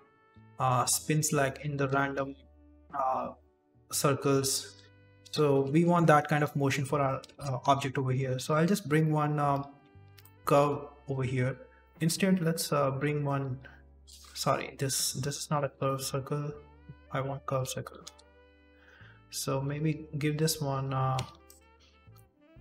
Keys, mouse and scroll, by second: 0.2 d, 0.6 z, 1.0-1.8 scroll down 7, 1.9 shift+middle click, 2.5 click, 2.8 d, 3.1 click, 4.7 d, 5.1 ctrl+z, 5.4 ctrl+z, 5.9-6.9 scroll up 5, 6.9 right click, 6.9 scroll up 1, 7.1 shift+a, 9.9 scroll up 2, 10.2 shift+middle click, 10.6 g, 11.3 shift+middle click, 11.4 scroll up 2, 11.6 Tab, 11.8 ctrl+click, 11.8 r, 11.8 g, 12.0 Delete, 12.8 shift+a, 13.8 Tab, 13.8 1, 14.4 Delete, 15.2 shift+a, 17.5 alt+g, 17.9 s, 18.4 Tab, 19.3 right click, 19.6 r, 20.8 r, 21.6 a, 21.9 v, 22.1 v.